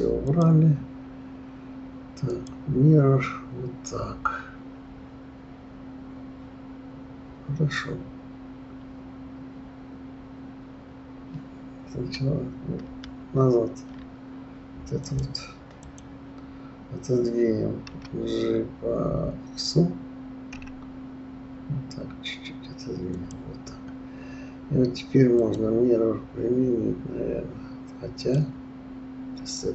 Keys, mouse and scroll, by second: 0.2-3.2 drag, 13.2 ctrl+z, 15.0 click, 15.7 click, 17.9 g, 25.4-29.7 drag.